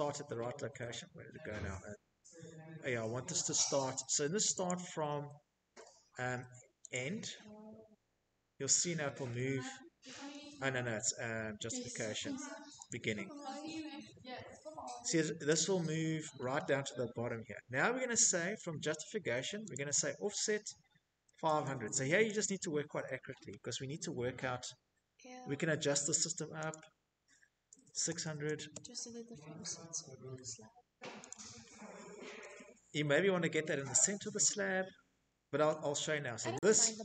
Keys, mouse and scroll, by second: 0.2 middle click, 0.6 middle click, 2.6 click, 2.6 scroll, 4.7 click, 4.8 click, 6.3-6.7 scroll, 7.4 middle click, 8.0 middle click, 9.6 click, 10.8 click, 14.3-15.1 scroll, 16.7-17.6 scroll, 17.6 click, 17.6-19.1 scroll, 19.1 typing, 20.1 Return, 24.6 click, 25.7-27.1 typing, 26.1 click, 32.6 click, 32.6 middle click, 33.6 shift+middle click, 34.6 click.